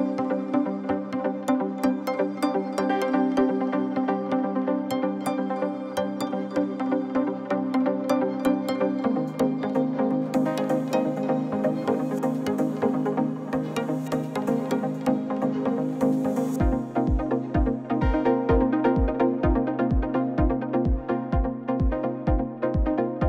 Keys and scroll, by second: 0.0-1.5 typing, 0.3 Escape, 2.7 shift+s, 3.2 shift+a, 4.5 r, 4.6 9, 4.8 Return, 5.7 r, 6.0 z, 7.8 ctrl+a, 8.0-8.8 typing, 9.4 Tab, 12.2 2, 12.3 Return, 18.3-18.7 typing, 18.9 Return, 22.3 ctrl+z.